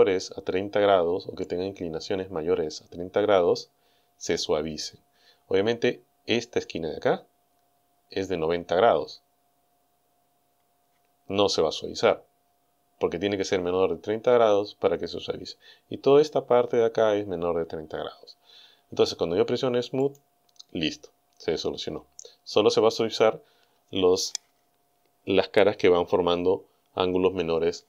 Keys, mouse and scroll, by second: 1.9 scroll up 1, 20.1 click.